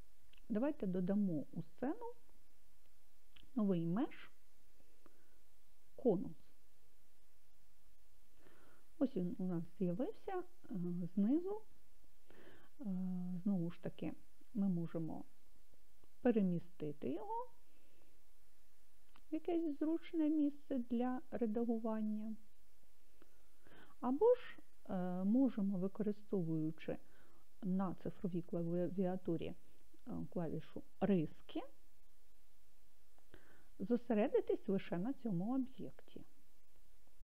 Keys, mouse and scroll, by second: 2.1-6.4 drag, 19.2 g, 23.3-25.3 drag, 32.5 KP_Divide.